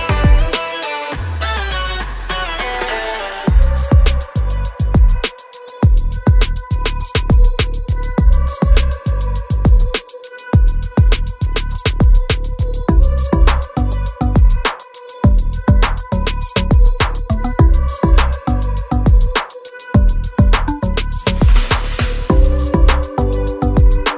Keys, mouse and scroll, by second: 1.3 ctrl+z, 2.5 z, 3.5 click, 9.3 click, 9.8 scroll down 1, 10.8 scroll up 1, 14.1 scroll down 1, 16.8 click, 18.1 scroll up 1, 19.5 click.